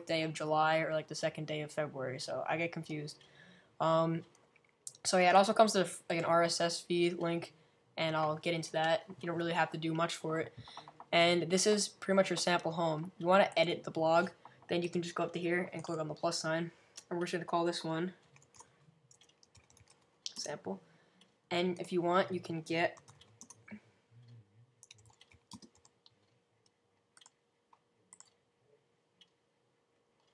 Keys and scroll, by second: 18.3-20.4 typing, 22.7-26.4 typing.